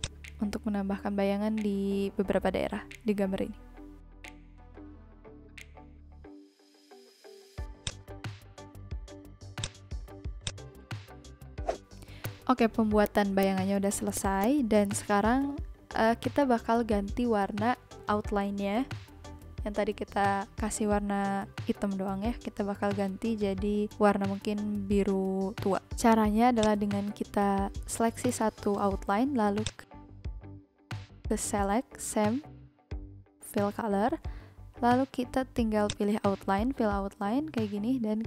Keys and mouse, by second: 5.0 v, 7.8 click, 9.5 click, 12.2 click, 13.0 click, 14.1 click, 26.5 click, 36.4 click.